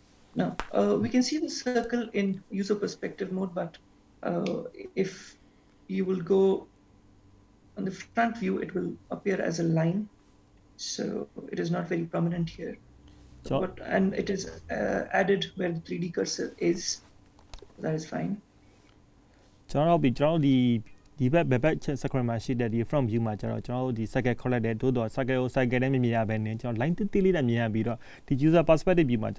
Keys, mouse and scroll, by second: 4.5 middle click, 18.5-19.8 scroll up 2, 19.8-20.2 scroll down 1, 20.7 shift+middle click, 21.7 middle click.